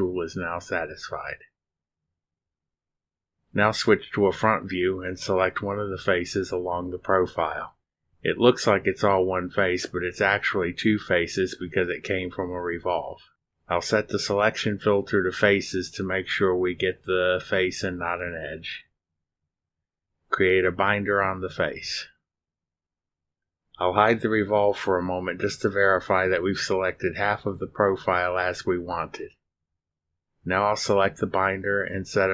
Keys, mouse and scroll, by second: 4.5 click, 5.9-6.8 drag, 8.2 click, 9.4 click, 12.6 click, 14.3 click, 18.7 click, 24.6 click, 28.9 click, 29.5 space.